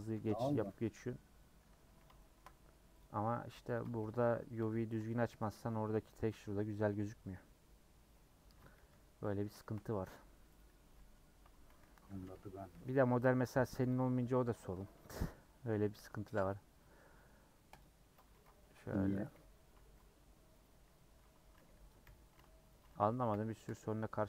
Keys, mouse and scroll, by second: 0.1 ;, 0.6-1.8 middle drag, 1.8 3, 2.2 shift+middle click, 3.0 click, 3.7 ctrl+click, 4.6 ;, 5.3 middle click, 5.4 a, 6.4 u, 8.5 Tab, 8.8 h, 9.0 scroll down 4, 9.2-10.6 middle drag, 10.6 click, 10.7 Tab, 11.0 middle click, 11.3-11.8 scroll up 2, 12.2 /, 12.5 middle click, 13.0 3, 13.9 click, 14.6 KP_Add, 17.8 m, 18.3 ctrl+z, 19.3 i, 22.0 i, 23.7 m.